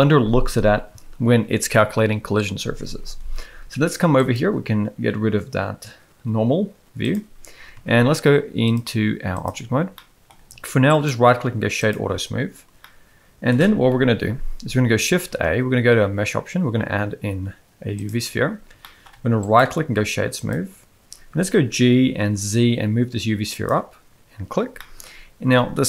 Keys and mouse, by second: 4.2-7.2 drag, 8.7-9.4 drag, 10.0 middle click, 11.0-11.9 right drag, 12.8-13.4 middle drag, 13.9 KP_1, 15.2 shift+a, 18.8 shift+middle click, 19.5-20.5 right drag, 21.5 g, 24.7-25.0 shift+middle drag.